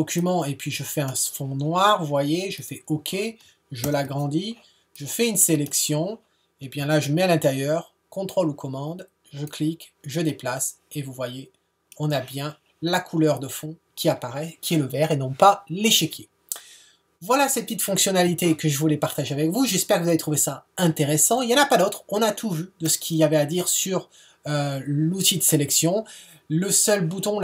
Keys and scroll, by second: 3.8 super+0.